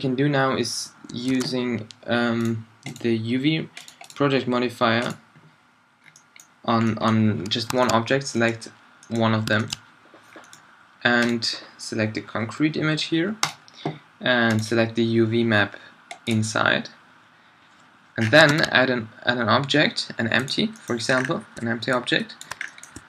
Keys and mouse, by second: 1.3 alt+a, 4.5 click, 6.0 middle click, 6.3 middle click, 6.8 middle drag, 18.2 middle click, 18.5 shift+a.